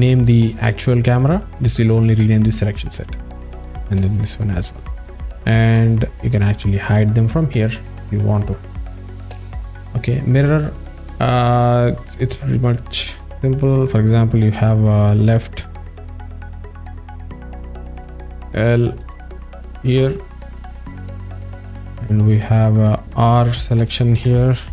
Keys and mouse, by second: 2.9 click, 3.9-4.8 drag, 6.3 click, 9.3 drag, 14.3-16.0 drag, 16.1-20.5 drag, 21.0 click, 22.4-24.7 drag.